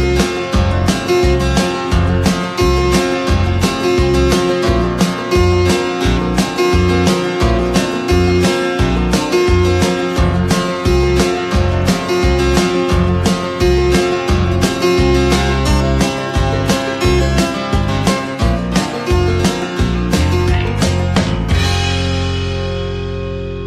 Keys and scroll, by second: 3.5 ctrl+z, 6.8 ctrl+=, 19.0 ctrl+-.